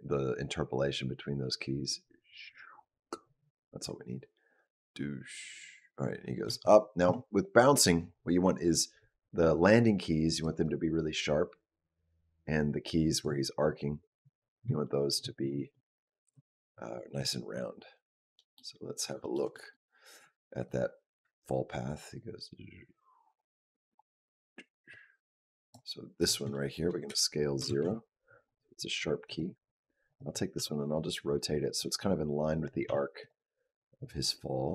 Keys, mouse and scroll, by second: 6.5 shift+middle click, 9.8 click, 10.5 click, 14.7 shift+middle click, 16.1 KP_Decimal, 17.0-18.2 scroll down 8, 18.2 middle click, 18.6-19.0 scroll down 3, 19.0 shift+middle click, 19.3 middle click, 20.6 click, 26.0 click, 26.3 shift+middle click, 26.9 s, 29.1 click, 29.9 click, 30.4 r, 32.7 r, 33.9 click.